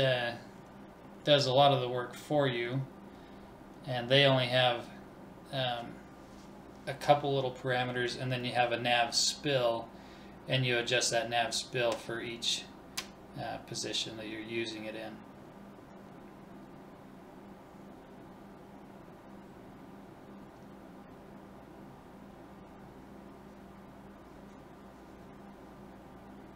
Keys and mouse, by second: 9.4-11.9 drag, 12.1 Left, 13.0 BackSpace, 17.6-20.9 drag, 21.6 BackSpace, 24.0 l.